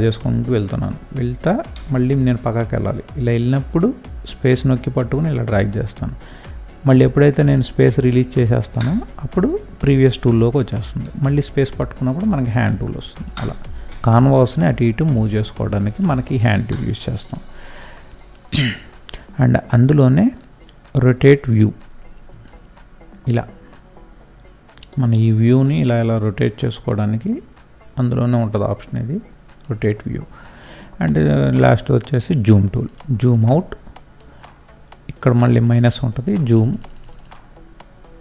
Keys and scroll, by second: 1.7 space, 11.0 space.